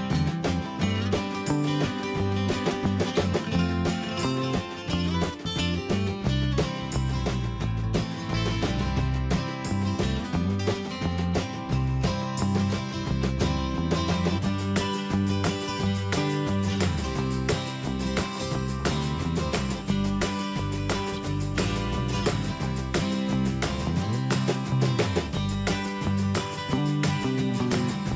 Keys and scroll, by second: 0.8 Down, 3.8 ctrl+alt+shift+n, 11.4 ctrl+[, 26.2 ctrl+t, 27.5 Return.